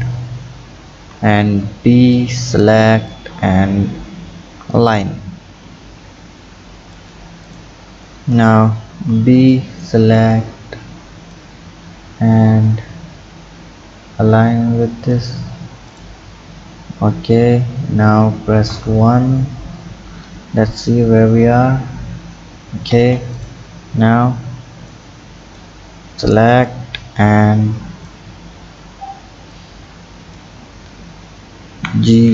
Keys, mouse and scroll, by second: 0.9 b, 3.1 click, 7.5 click, 8.9 b, 11.3-14.4 drag, 15.9 click, 17.2 Tab, 18.7 KP_1, 22.9 Tab, 23.3 click, 24.2 b, 26.5-28.4 drag, 28.4 scroll up 4, 29.5 click, 30.3 click.